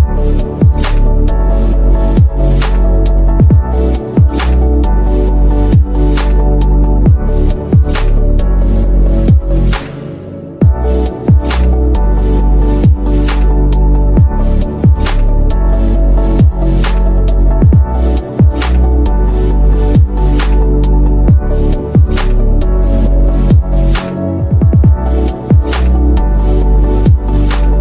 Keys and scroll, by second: 1.1 ctrl+z, 7.6 ctrl+Page_Down, 10.7 F3, 11.9 shift+F2.